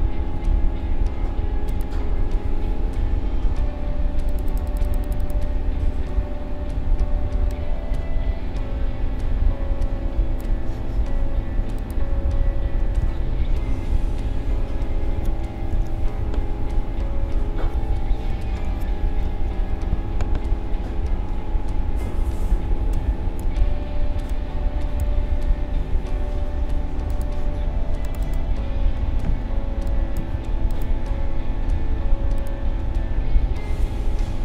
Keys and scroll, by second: 13.0 ctrl+z, 15.7 ctrl+x, 19.2 ctrl+shift+v.